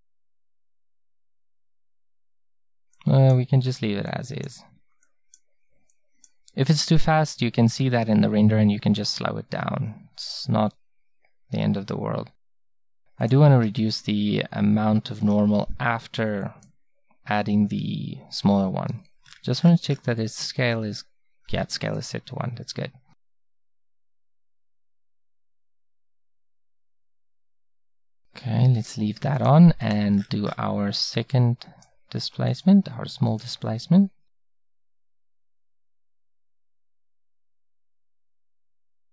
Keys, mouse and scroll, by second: 7.9-13.3 middle drag, 18.4-20.1 middle drag, 20.1-22.4 scroll up 1, 22.4-24.8 middle drag, 24.8-25.4 scroll up 1, 26.5-28.8 scroll up 1.